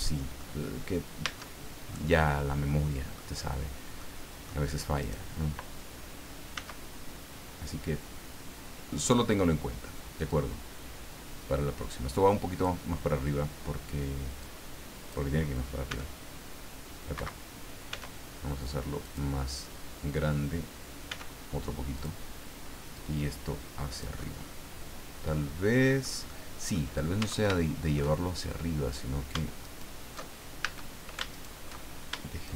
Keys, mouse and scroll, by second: 1.2 Tab, 1.9-3.3 middle drag, 4.0 middle click, 5.0 right click, 6.5 s, 9.0 click, 10.3-12.8 drag, 14.4 click, 15.9 s, 17.2 Escape, 17.9 s, 19.0 click, 21.1 s, 21.9 click, 22.9-24.2 drag, 24.2-26.2 middle drag, 26.3 middle click, 27.2 Tab, 27.6 shift+middle click, 29.6 alt+shift+right click, 30.6 alt+shift+a, 31.3 alt+shift+right click, 32.4 shift+right click.